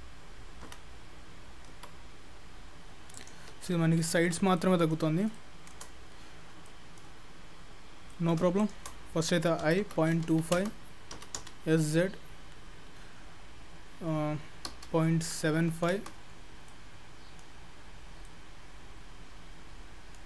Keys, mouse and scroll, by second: 0.7 i, 1.8 i, 3.8 ctrl+z, 4.4-5.3 scroll down 2, 4.6 middle click, 5.4-5.8 shift+scroll down 1, 5.8 shift+middle click, 6.7 middle click, 7.3-8.4 scroll up 8, 8.1 middle click, 8.6 shift+click, 9.0-9.7 scroll down 1, 9.7 i, 11.2 s, 16.7 middle click, 17.8-18.3 scroll down 2, 18.3 middle click.